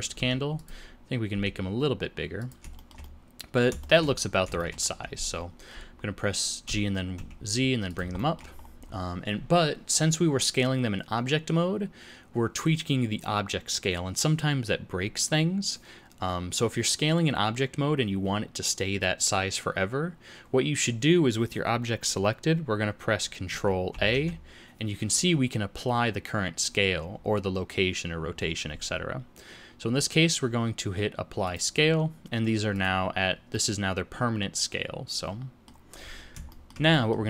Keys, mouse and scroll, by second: 1.3 s, 2.7 shift+middle click, 3.0 middle click, 3.8 shift+middle click, 4.2 scroll down 4, 4.6 shift+middle click, 6.7 g, 8.2 shift+middle click, 8.6 scroll up 3, 23.9 ctrl+a, 32.7 click, 33.5 middle click, 36.5 shift+middle click.